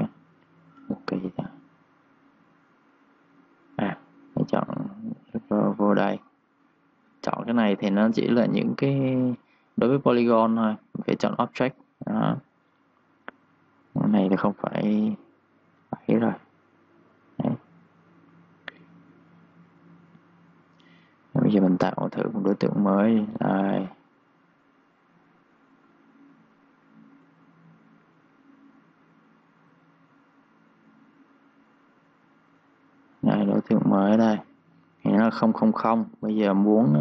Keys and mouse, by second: 4.7 click, 14.9-18.4 typing, 15.7 click, 16.6 click, 17.2 click, 17.8 click, 18.8 click, 20.1 typing, 20.2 click, 22.7-27.9 typing, 22.8 click, 23.5 click, 24.3 click, 24.6 click, 25.1 click, 25.5 click, 25.9 click, 26.3 click, 27.7 click, 32.9 2, 33.1 click, 34.1 click, 34.5 1, 35.3 click, 36.3 3, 36.5 click, 36.9 3.